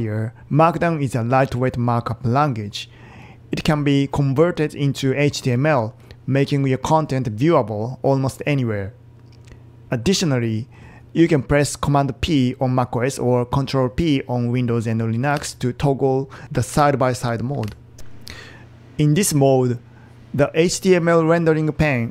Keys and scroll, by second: 15.4 super+p, 16.7 super+p, 17.6 super+p.